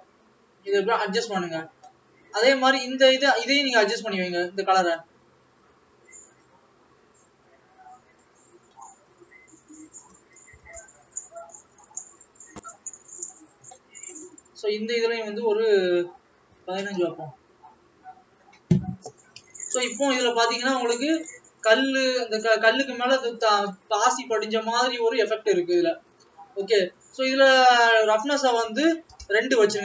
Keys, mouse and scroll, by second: 7.3 click.